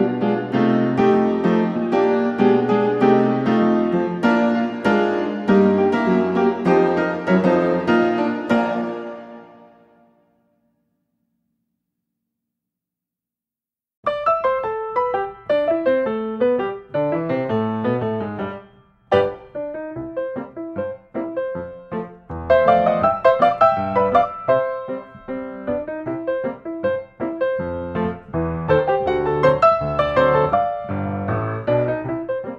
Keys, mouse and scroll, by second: 0.6 scroll, 1.9 ctrl+s, 2.8 click, 4.3 click, 5.3 click, 5.4 Escape, 6.3 click, 6.8 q, 7.7 space, 8.3 s, 9.0 click, 9.7 click, 10.6 click, 11.9 click, 12.2 Escape, 13.6 click, 14.6 click, 16.6 click, 16.9 Escape, 18.7-19.8 drag, 20.1-21.2 drag, 21.7 click, 22.8 click, 23.4 Escape, 24.7 click, 25.5 click, 28.2 click, 29.0-29.4 scroll down 4, 29.7 Escape, 29.7-30.0 scroll, 30.4 scroll, 32.1 click.